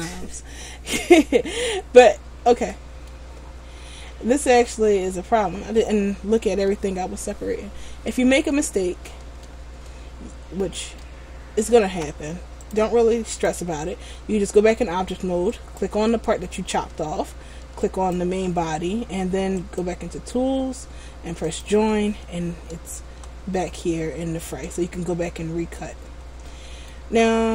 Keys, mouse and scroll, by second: 3.6-4.8 scroll down 4, 4.8-5.1 scroll up 1, 5.1 middle click, 8.1 scroll up 3, 9.2 middle click, 10.0 shift+middle click, 11.1 middle click, 11.3-12.1 scroll up 1, 12.7 click, 15.8 right click, 18.0 shift+right click, 19.8 click, 23.1 Tab, 24.1 middle click, 25.0-25.4 scroll up 2, 25.9 middle click, 25.9-26.3 scroll up 1.